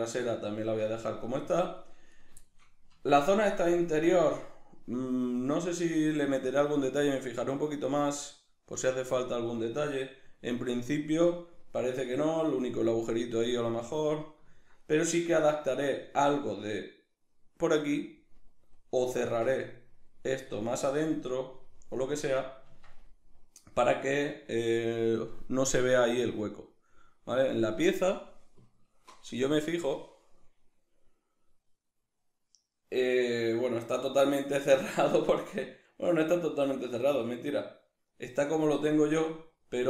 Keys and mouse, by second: 0.6 Tab, 2.2 right drag, 2.4-20.6 shift+middle drag, 2.9 Tab, 19.2 Tab, 19.6 right click, 20.6 Tab, 21.8 middle click, 22.7 Tab, 23.1-27.1 middle drag, 39.1-39.8 middle drag.